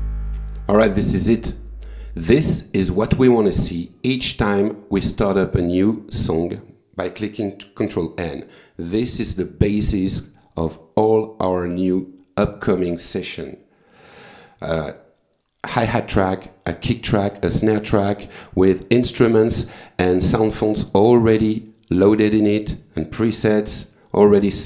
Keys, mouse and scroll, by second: 1.7 click, 2.8 click, 6.9 click, 7.5 click, 8.2 click, 8.8 click, 12.9 click, 14.7 click, 15.5 click, 22.4 click.